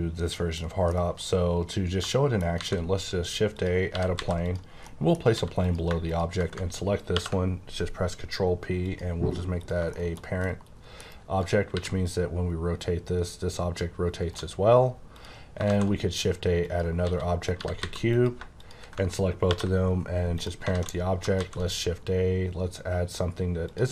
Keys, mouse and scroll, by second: 0.8 middle click, 2.5 shift+a, 3.5 click, 3.9 typing, 4.4 click, 4.8-5.1 scroll down 1, 5.3 s, 5.6 click, 7.0 ctrl+p, 8.8 click, 9.6 click, 9.8 shift+middle click, 11.4 click, 11.7 r, 14.2 right click, 14.7 scroll down 1, 15.1 click, 15.6 shift+a, 16.6 click, 17.0-17.8 typing, 18.1 click, 19.3 p, 20.3 click, 20.7 a, 23.6 click.